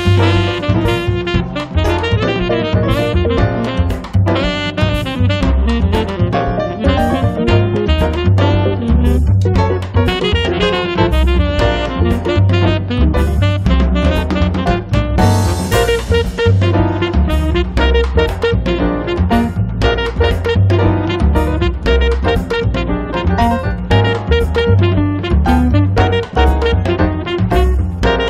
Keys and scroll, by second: 18.4 f, 20.2 space, 24.3 ctrl+z, 25.1 space, 25.5 Escape.